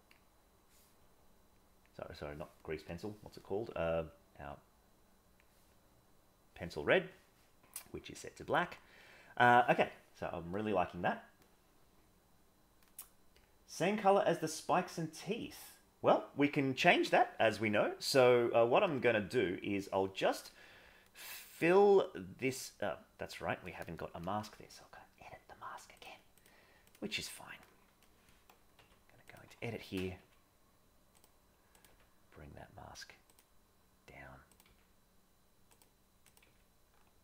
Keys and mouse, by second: 1.5 click, 4.1 click, 4.5 click, 8.9 middle click, 21.3-22.5 drag, 26.0 click, 28.0 middle click, 28.7 Tab, 29.2 click, 30.2 g, 34.5 click, 34.6 g, 36.2 click.